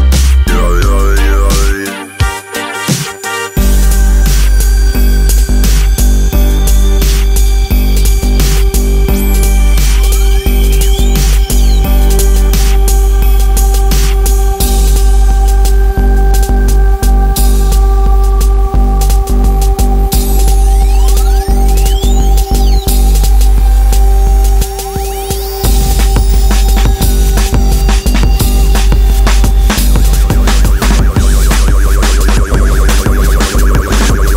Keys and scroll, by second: 2.5 Escape, 4.9 Escape, 11.9 Escape, 15.2 Escape, 19.3 Escape, 24.4 Escape, 27.9 Escape, 30.4 Escape, 33.9 Escape.